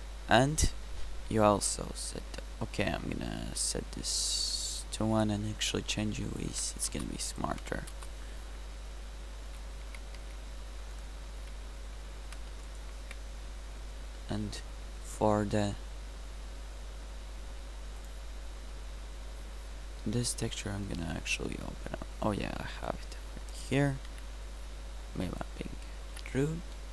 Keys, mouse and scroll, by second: 9.9 Tab, 10.3 s, 11.4 s, 13.1 Tab, 24.1 n, 26.1 n.